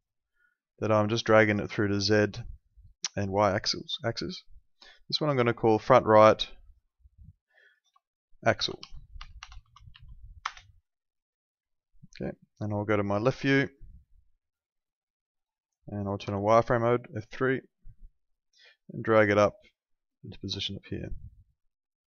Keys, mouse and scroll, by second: 8.3-10.4 typing, 10.4 KP_Enter, 11.7 alt+middle click, 16.2 F3, 17.1 middle click, 18.6 click, 21.4 click.